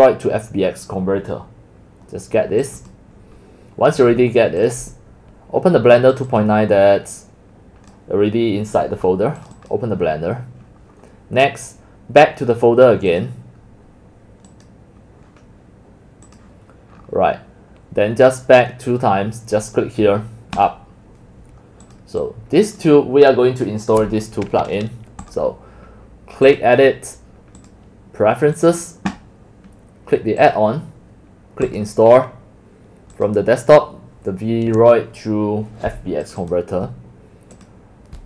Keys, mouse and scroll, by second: 2.8 click, 3.6 scroll down 1, 4.7 click, 6.8 click, 7.6 scroll down 2, 10.1 click, 13.2 click, 14.0-14.3 drag, 14.6 click, 14.7-17.0 drag, 17.0 middle drag, 17.0 scroll, 17.4-20.6 scroll up 5, 20.6 middle click, 20.6 scroll, 20.7-22.7 drag, 25.3 click, 26.5 click, 27.6 click, 28.6 click, 30.4 click, 31.7 click, 33.1 click, 36.3 click, 36.4 click, 37.6 click.